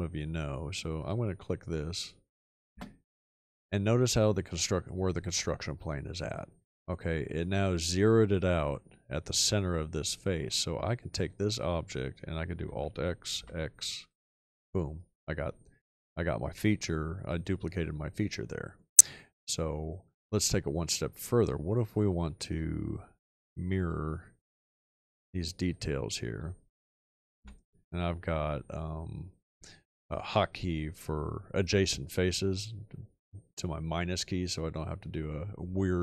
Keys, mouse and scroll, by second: 2.7 space, 12.6 alt+x, 13.3 x, 27.5-28.5 scroll up 2, 28.5-28.9 scroll up 1.